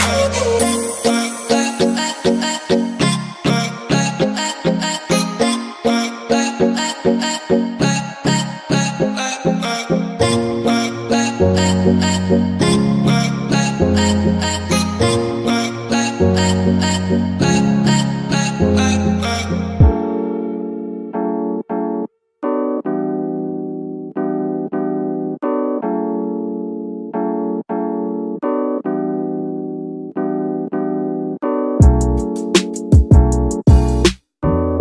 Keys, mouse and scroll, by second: 1.1 click, 1.3-2.3 shift+middle drag, 2.3 r, 3.0 KP_Enter, 3.3 alt+a, 3.6 ctrl+s, 3.8-4.3 scroll up 2, 4.3 click, 4.6 scroll up 2, 4.8 g, 5.8 click, 6.3 g, 7.0 click, 7.2 g, 8.2 click, 8.4 g, 9.0 click, 9.2 g, 9.8 click, 10.1-10.5 shift+middle drag, 10.5 g, 11.6 alt+a, 11.8 click, 12.7 g, 13.2 click, 13.4 alt+a, 13.7 scroll down 1, 14.0 ctrl+s, 14.4 scroll up 1, 14.9 click, 15.4 drag, 17.2 scroll down 1, 17.5-18.4 middle drag, 18.4 alt+a, 18.8-19.1 scroll down 2, 19.1-19.6 middle drag, 19.6 z, 23.3-27.3 middle drag, 27.3 ctrl+s, 28.1 click, 28.6 h, 30.1 scroll up 1, 31.4-32.3 drag, 32.7 g, 34.1 right click, 34.7 h.